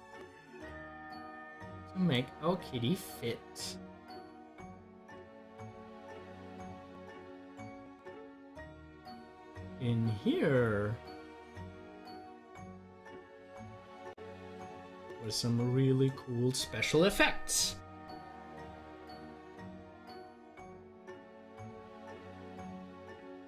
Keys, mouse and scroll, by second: 3.1 scroll down 1, 5.5 scroll down 1, 15.4 scroll up 1.